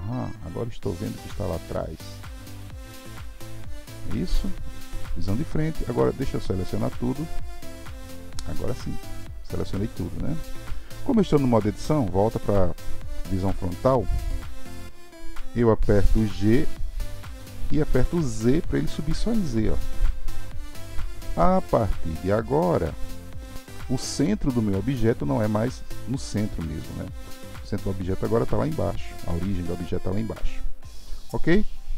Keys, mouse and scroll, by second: 1.2-4.4 middle drag, 4.9 KP_1, 6.0 click, 7.7-10.7 middle drag, 11.2 KP_1, 23.4 middle click.